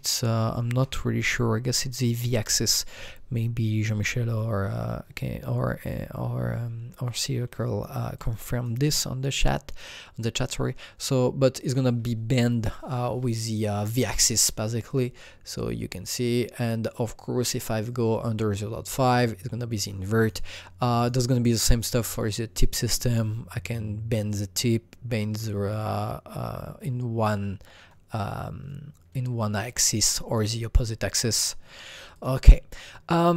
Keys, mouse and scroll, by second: 0.2 alt+scroll up 1, 1.5-3.6 scroll down 2, 6.3-10.5 alt+middle drag, 6.3-6.8 alt+scroll down 1, 7.0 alt+click, 8.1 alt+double click, 8.9-14.0 alt+drag, 14.8-21.8 alt+drag, 14.8 alt+scroll down 1, 21.8 click, 22.3-32.1 drag, 32.1-33.3 drag.